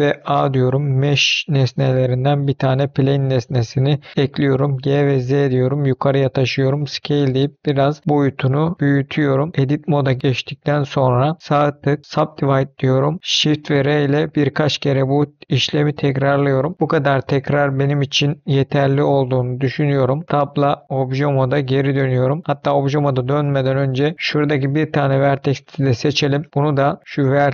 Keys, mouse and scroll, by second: 0.1 shift+a, 4.1 g, 4.9 z, 5.9 click, 6.7 s, 9.3 click, 9.5 Tab, 11.4 right click, 13.9-15.9 typing, 16.7 middle click, 16.7 scroll down 1, 16.8 scroll up 2, 17.4 scroll down 3, 17.7 middle click, 20.3 Tab, 22.8 Tab, 23.5 middle click, 24.1 scroll up 3, 25.1 click, 25.6-26.1 scroll down 5, 26.3 middle click, 26.5 scroll up 1, 27.2 click.